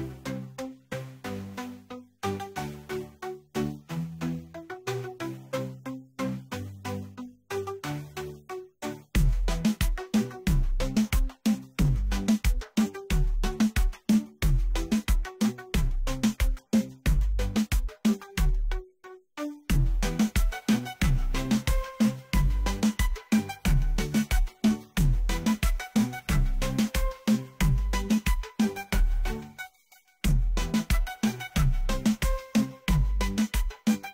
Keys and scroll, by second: 2.1 Return, 14.2 m, 14.5 space.